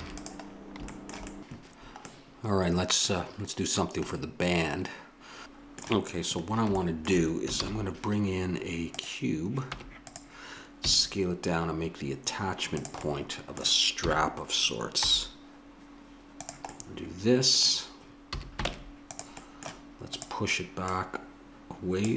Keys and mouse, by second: 0.0 ctrl+s, 5.2 a, 5.2 x, 7.5 shift+a, 9.7 Tab, 10.8 s, 13.0-15.0 drag, 14.0 s, 16.7 click, 18.3 a, 18.6 ctrl+Tab, 20.1 right click, 20.9 click.